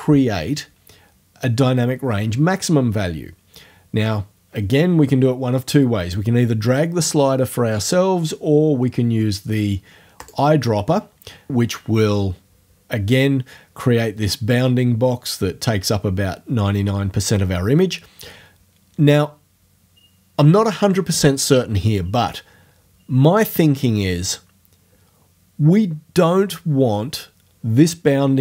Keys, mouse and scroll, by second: 10.3 click.